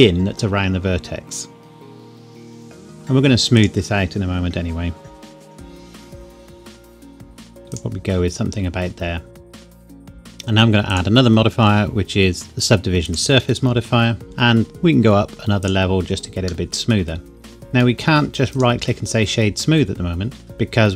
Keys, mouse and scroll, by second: 1.5 click, 2.2 click, 2.6 ctrl+a, 2.9 click, 5.1 KP_1, 5.4 g, 5.8 click, 6.8 ctrl+a, 7.7 click, 9.4 ctrl+a, 9.6 click, 9.8 ctrl+a, 9.9 click, 10.1 Tab, 10.9 click, 13.2 click, 14.2 middle click, 15.6 click, 16.7 middle click, 18.6 right click, 20.6 middle click.